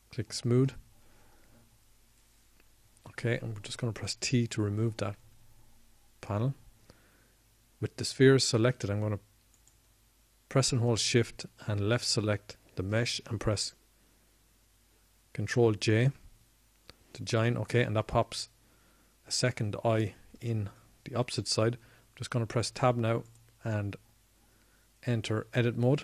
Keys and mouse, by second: 7.5 t, 19.5 ctrl+j, 25.2 Tab.